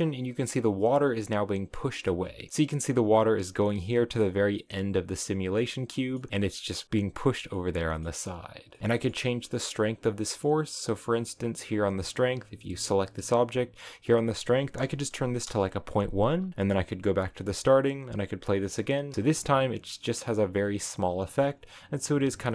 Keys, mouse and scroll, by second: 0.1 scroll down 3, 1.9 middle click, 2.5 space, 3.0 space, 3.7-6.3 shift+middle drag, 6.3 space, 8.0 middle click, 8.8 space, 9.0-11.9 shift+middle drag, 12.3 g, 13.7-16.5 drag, 16.9-18.9 drag, 18.9 shift+middle click, 19.1 scroll up 3.